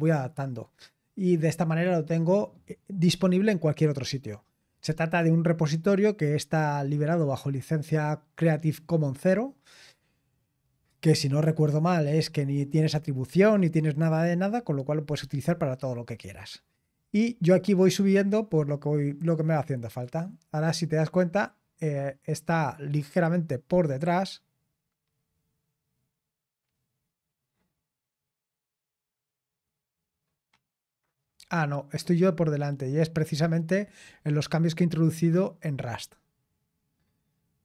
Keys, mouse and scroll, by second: 15.8-16.6 scroll down 1, 17.2-18.4 scroll up 2, 18.4-19.6 scroll down 2, 19.6 scroll down 1, 19.8-21.8 drag, 34.1-35.5 scroll down 2, 35.5-37.4 scroll down 1, 37.4-37.6 scroll down 1.